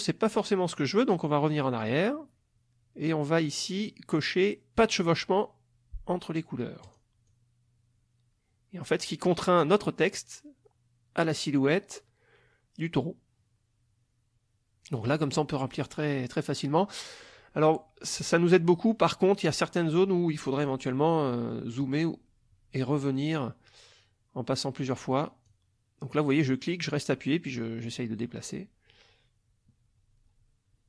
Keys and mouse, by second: 1.8 click, 6.9 click, 7.2-20.8 drag, 20.9 middle click, 21.8-25.3 drag, 25.4 click, 26.5-30.8 drag.